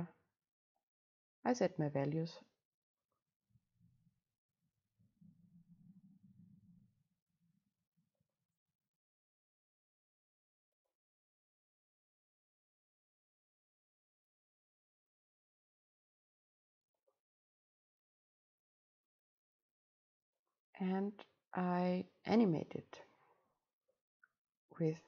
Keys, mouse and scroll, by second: 3.0 click, 3.5-5.2 middle drag, 5.2 click, 8.2 click, 8.6-10.7 middle drag, 11.4 middle click, 12.2-16.2 right drag, 16.2-17.5 drag, 17.5-19.5 middle drag, 19.5-20.5 drag, 23.2-24.7 right drag, 24.7 double click.